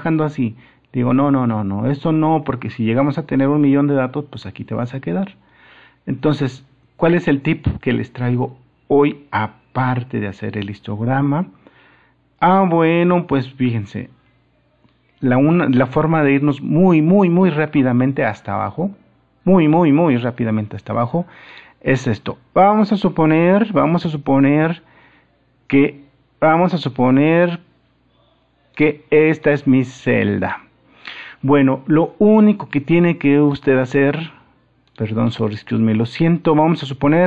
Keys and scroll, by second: 13.9 super+-.